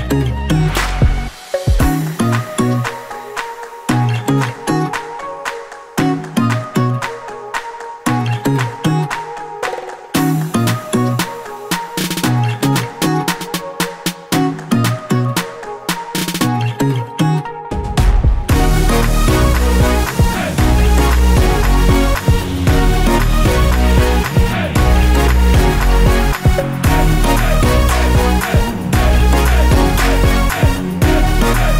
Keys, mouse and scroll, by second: 0.1 s, 1.9 click, 2.1 g, 3.2 click, 3.3-5.4 middle drag, 4.3 s, 5.4 click, 5.6 g, 7.2 click, 7.4-11.2 middle drag, 7.8 scroll up 1, 8.7 s, 11.2 click, 11.5 g, 13.7 click, 13.9-18.5 middle drag, 16.5 Tab, 16.8 typing, 18.5 click, 19.1 Delete, 19.9 a, 20.3 e, 23.1 click, 23.3 Tab, 23.5 click, 23.7-27.9 middle drag, 24.3 scroll down 1, 24.5 scroll up 1, 26.3 KP_5, 26.9 Tab, 27.9 click, 28.4 g.